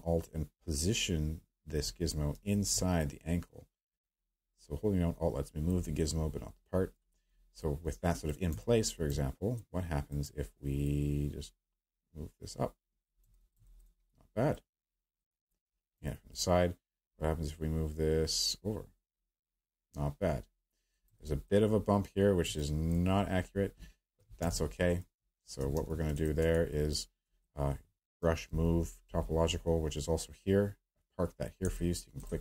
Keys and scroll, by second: 24.4 q, 25.7 q, 28.2 b, 28.5 m, 29.0 t.